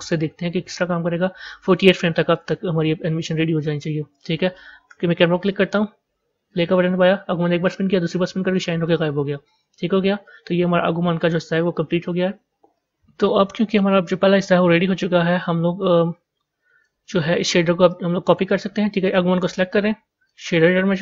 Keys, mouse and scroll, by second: 0.0 click, 2.3-4.8 drag, 4.8 KP_0, 6.5-12.3 drag, 12.3 z, 13.8 a, 14.7 z, 16.8-19.1 drag.